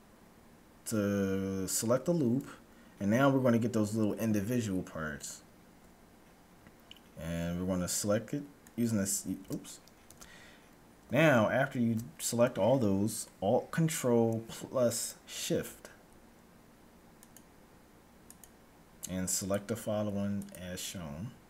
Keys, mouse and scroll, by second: 8.8-10.3 right drag, 9.9 ctrl+z, 17.3-21.4 right drag.